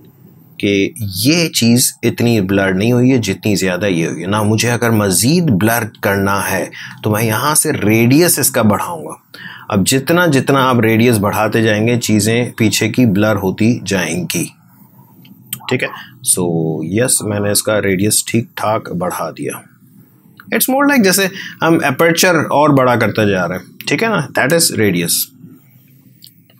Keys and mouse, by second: 7.5-15.5 drag, 16.4-25.3 drag.